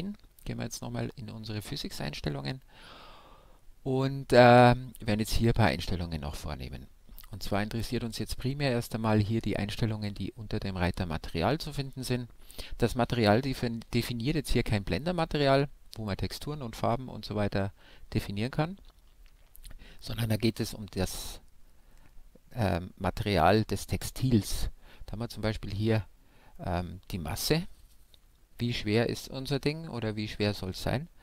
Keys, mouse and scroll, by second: 4.1-31.2 middle drag.